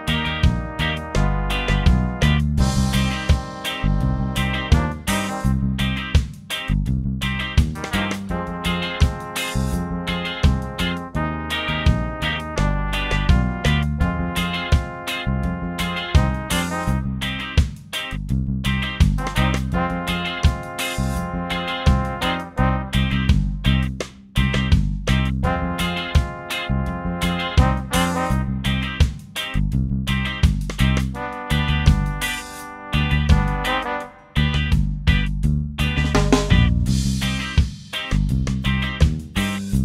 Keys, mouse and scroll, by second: 3.5 click, 5.3 click, 6.6 2, 7.1 0, 9.3 click, 12.0 Return, 13.8 click, 14.6 click, 16.4 2, 16.9 0, 17.8 Return, 19.8 click, 21.0-23.9 ctrl+drag, 24.7 click, 26.6-29.2 drag, 31.2 ctrl+d, 32.6-36.0 ctrl+drag, 36.5-37.8 ctrl+drag, 38.9 ctrl+d, 39.4-39.8 ctrl+drag.